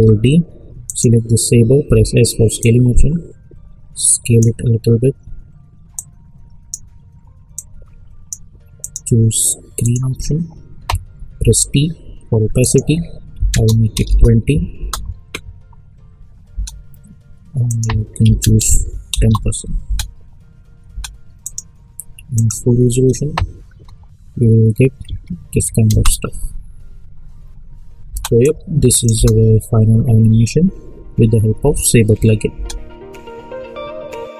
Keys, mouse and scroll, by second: 0.8 click, 1.8 s, 2.6-8.8 drag, 11.4 t, 12.6 click, 14.0 Return, 14.7 space, 17.6 click, 19.1 Return, 19.8 space, 21.4 click, 25.6 `, 25.9 space, 28.3 space, 28.4 click, 29.1 space, 32.5 space.